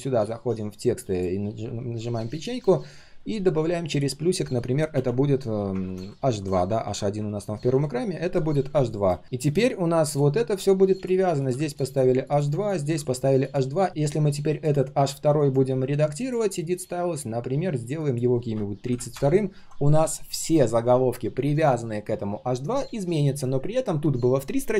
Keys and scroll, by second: 9.2 ctrl+z.